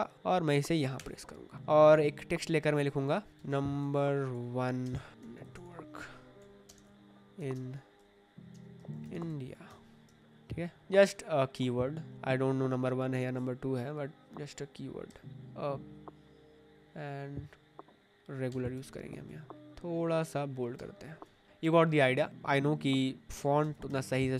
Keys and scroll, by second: 0.9 Return, 1.7 space, 2.0 t, 3.0-5.1 typing, 6.3-10.2 typing, 9.6 Escape, 15.0 Escape, 18.4 Escape, 20.7 Escape, 22.1 space, 23.6 alt+Right, 23.8 Escape.